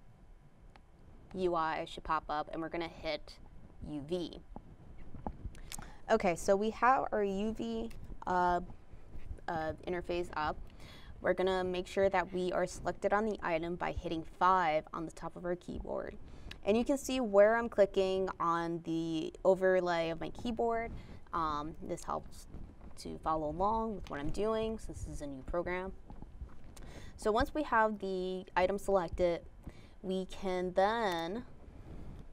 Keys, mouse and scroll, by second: 4.3 ctrl+click.